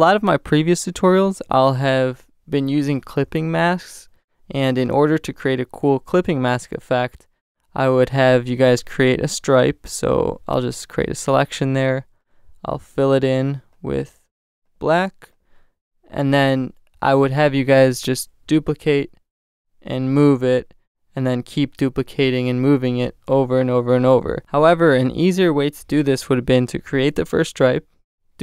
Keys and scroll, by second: 3.8 shift+super+n, 4.8 shift+super+Return, 17.0 super+d, 18.4 super+j, 22.4 space, 23.0 super+space, 23.2 super+j, 28.3 super+j.